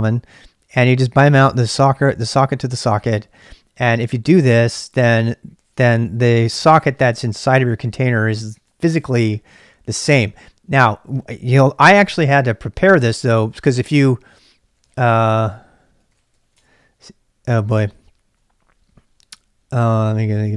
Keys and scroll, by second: 13.2 ctrl+c, 14.5-18.3 typing, 19.8-20.5 typing.